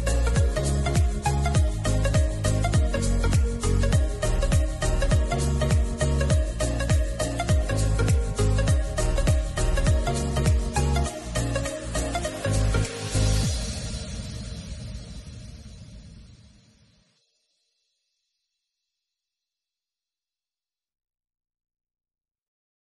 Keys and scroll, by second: 4.1 super+s, 5.1 shift+', 9.1 alt+shift+Left, 9.5 super+r, 14.1 super+c, 15.7 shift+f, 16.0 shift+9, 17.9 alt+{.